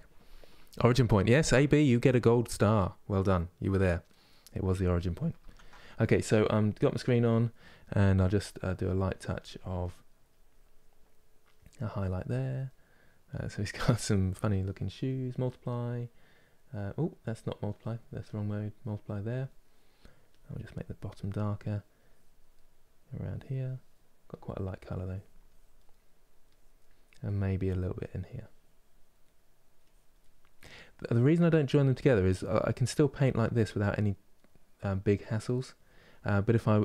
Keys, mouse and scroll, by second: 5.1 ctrl+z, 5.6-7.8 middle drag, 7.8 f, 8.4-9.5 drag, 9.5 middle click, 9.9-12.3 drag, 12.3-19.0 middle drag, 19.0 click, 19.3 middle click, 20.0 click, 20.9 middle click, 21.6 click, 22.2 middle click, 22.9-24.3 drag, 24.3 middle click, 24.7 click, 25.5 middle click, 26.1 click, 26.4-27.6 middle drag, 27.6-28.9 drag, 28.9 middle click, 29.5 click, 29.8 middle click, 30.3 click, 30.7-32.0 middle drag, 32.0 click, 32.6 middle click, 33.0 click, 33.6-34.8 middle drag, 34.8 click, 35.8-36.8 middle drag.